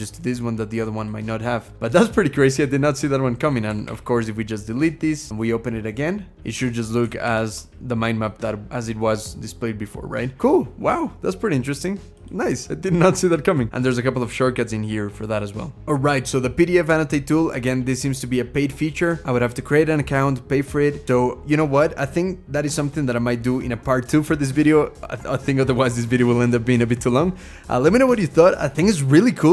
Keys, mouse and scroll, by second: 3.5 d, 3.7 d, 7.1 ctrl+shift+h.